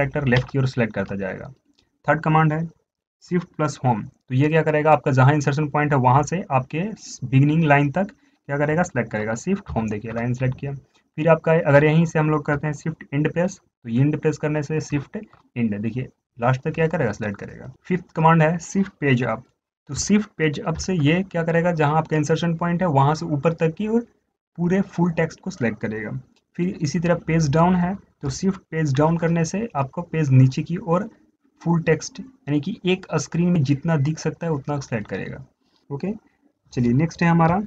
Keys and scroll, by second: 4.6 shift+Left, 9.5 shift+Home, 13.8 shift+Home, 14.8 shift+End, 21.0 shift+Page_Up, 29.0 shift+Page_Up, 29.3 shift+Page_Down.